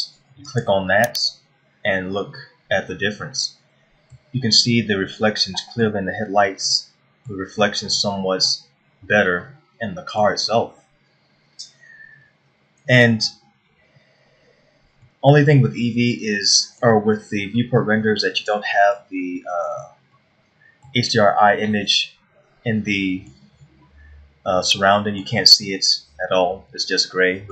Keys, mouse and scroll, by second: 1.6 click, 2.6-3.0 scroll down 1, 3.0 middle click, 5.7 middle click, 7.3 middle click, 8.3 middle click, 10.0 shift+middle click, 15.7 middle click, 19.0 middle click, 20.8 middle click, 23.5 middle click, 25.2 middle click, 27.4 middle click.